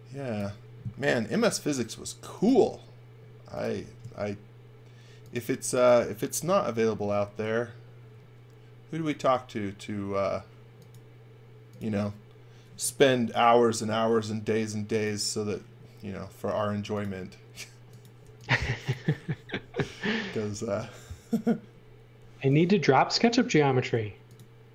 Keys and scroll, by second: 0.0-1.1 typing, 13.7 super+z, 18.2 e, 23.7 a.